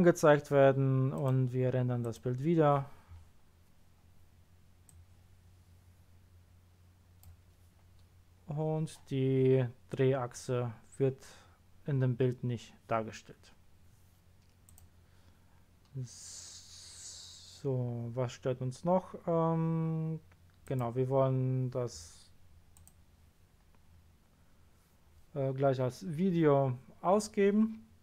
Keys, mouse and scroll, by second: 1.1 click, 2.0 click, 4.8-6.8 drag, 14.6 click, 20.6 click, 21.8 scroll up 1, 22.7 click, 23.5-24.2 scroll up 1, 26.0-26.3 scroll down 1, 26.5 scroll down 1.